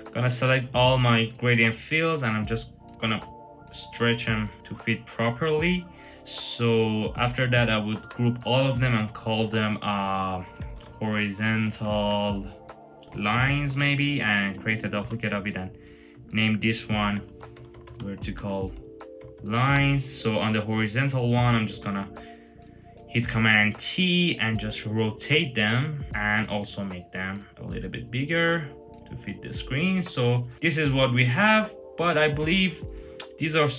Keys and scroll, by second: 1.1 super+t, 4.5 Return, 7.8 super+g, 10.0-13.9 typing, 14.8 super+j, 16.7-19.8 typing, 21.5 super+t, 29.8 Return.